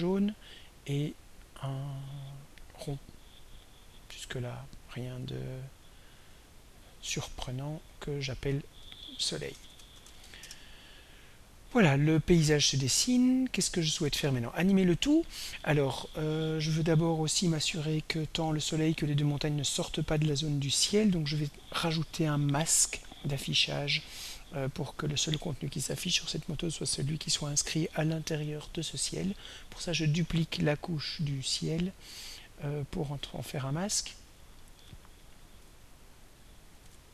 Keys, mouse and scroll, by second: 1.5 click, 5.3-6.5 drag, 8.3 click, 9.6 shift+Home, 9.7-10.7 typing, 13.0 click, 13.6 click, 21.3 click, 31.8 click, 33.0 click, 33.7 click, 34.3 click, 36.8 Home.